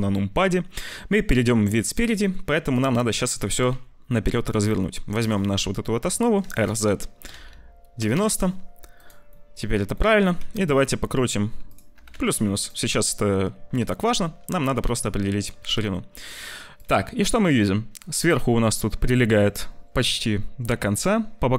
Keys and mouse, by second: 1.8 click, 2.1 n, 2.7 click, 6.3 r, 8.8 click, 9.2 click, 9.9 click, 10.1 r, 11.8 g, 12.7 `, 14.5 g.